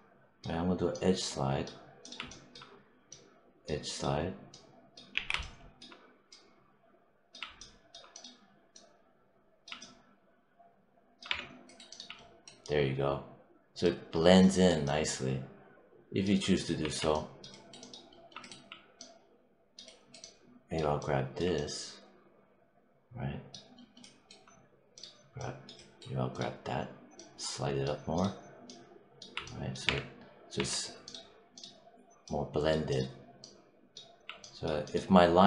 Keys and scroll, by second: 5.0 z, 11.1 3, 16.7 1, 29.7 3.